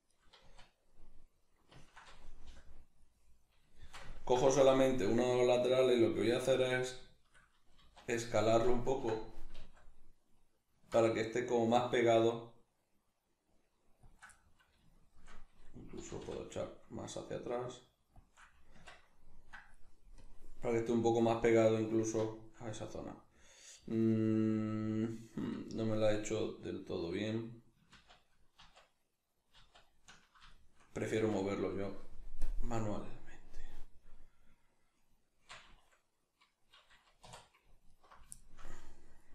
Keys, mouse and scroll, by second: 0.2 right click, 0.4 z, 0.9-14.1 middle drag, 2.5 b, 4.6 b, 7.8 z, 9.6 alt+s, 14.1 shift+click, 14.4-18.3 middle drag, 16.0 g, 18.3 shift+click, 18.4-20.2 middle drag, 18.8 Tab, 20.2-20.7 drag, 20.7-32.4 middle drag, 28.1 ctrl+z, 31.1 Tab, 32.4-35.0 drag, 35.0-37.3 right drag, 37.3 3, 37.9 alt+right click, 38.4-39.3 shift+middle drag.